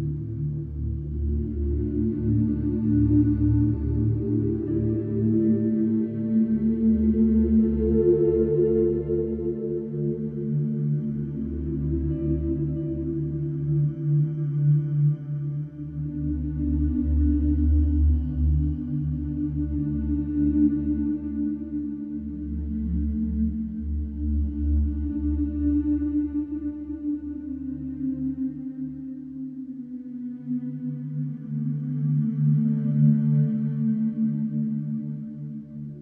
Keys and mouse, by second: 3.9 ctrl+z, 5.6 alt+h, 8.3 Tab, 11.6 space, 11.8 space, 12.3 Down, 12.8 Left, 14.3 shift+click, 24.3 s, 24.4 x, 26.7 Tab, 27.7 ctrl+z, 28.1 ctrl+z, 28.7 ctrl+z, 29.2-29.6 middle drag, 29.7-30.2 middle drag, 30.6 s, 30.7 x, 31.5 Tab, 32.9 Tab.